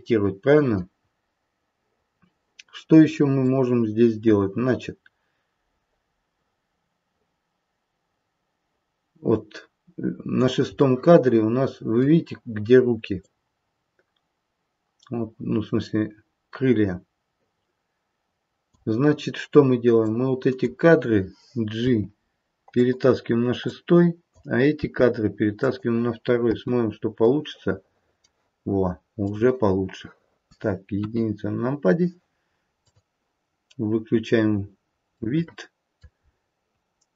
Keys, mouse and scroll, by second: 1.0-1.9 scroll up 2, 1.9-3.4 scroll down 1, 3.4 click, 10.8 middle click, 13.2 click, 19.9 click, 21.7 g, 23.5 click, 24.8 g, 26.5 space, 28.2 middle click, 29.3 click, 30.1 middle click, 30.9 KP_1, 32.7 click, 34.7-35.1 scroll down 1, 35.1 middle click, 36.1-36.7 scroll up 1, 36.7 scroll down 1, 37.0-37.1 scroll down 1.